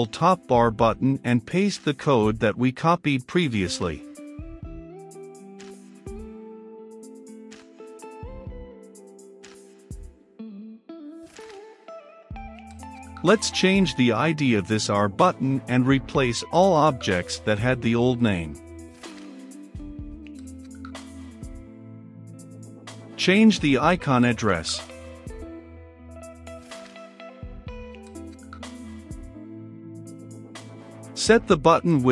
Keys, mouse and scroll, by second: 0.2-5.7 drag, 6.0 ctrl+v, 8.2-9.3 middle drag, 9.3-10.9 drag, 10.9-13.3 typing, 14.3 click, 15.3 ctrl+c, 15.9 click, 16.6 ctrl+v, 17.0 click, 17.7 ctrl+v, 18.3 click, 19.4 ctrl+v, 21.7-22.7 drag, 22.7-23.5 typing, 24.8-26.3 typing, 27.6-29.4 drag, 29.4-30.8 middle drag, 30.8-32.1 drag.